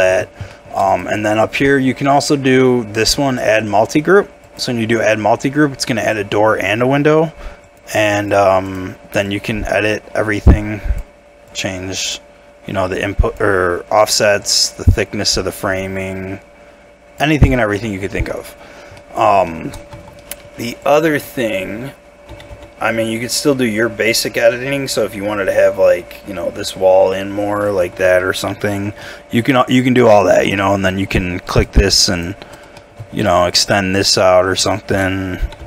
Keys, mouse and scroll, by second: 0.5 shift+middle click, 5.1-7.1 scroll up 1, 8.6 double click, 17.5 middle click, 18.2 Tab, 18.5 scroll down 1, 19.0 middle click, 19.9 Tab, 19.9 shift+middle click, 20.2 middle click, 22.3 g, 22.5 y, 23.0 x, 27.7 ctrl+click, 28.0 middle click, 28.7 Tab, 29.0 middle click, 30.4 middle click, 30.4 Tab, 30.6 middle click, 31.0 scroll up 1, 31.9 shift+click, 32.8 middle click, 33.2 shift+click, 35.5 g.